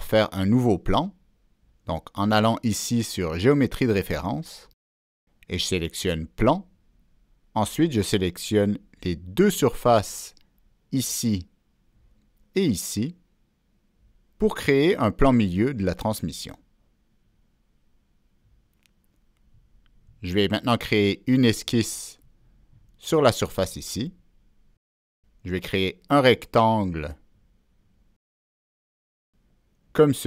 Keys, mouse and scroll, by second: 2.2-3.3 middle drag, 4.1 click, 7.0 click, 7.0 middle click, 9.3 click, 11.0 click, 12.3 middle click, 13.9 click, 16.4 click, 18.9 click, 20.0-21.4 middle drag, 21.4 click, 22.2 middle click, 22.2 click, 22.9 click, 23.1 middle click, 24.3 click, 25.1 scroll up 1, 25.8 click, 27.8 click, 29.9 click.